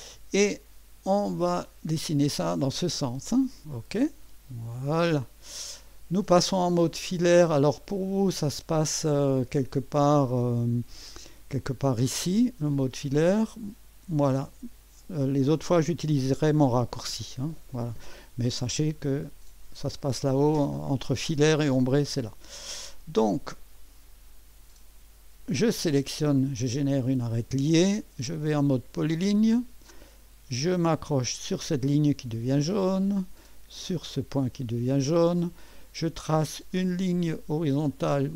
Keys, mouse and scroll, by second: 5.2-5.8 scroll up 1, 5.8 right click, 6.5-7.0 scroll up 1, 7.0-8.2 right drag, 12.2 click, 14.5 click, 18.1 right click, 23.8 click, 25.5 click, 29.0 click, 32.2 click, 34.4 click.